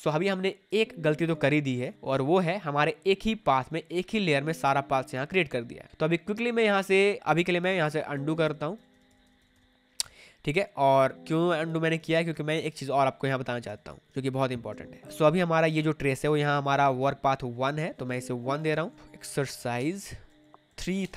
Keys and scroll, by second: 1.4 space, 7.1 ctrl+z, 10.8 space, 18.9-21.1 typing.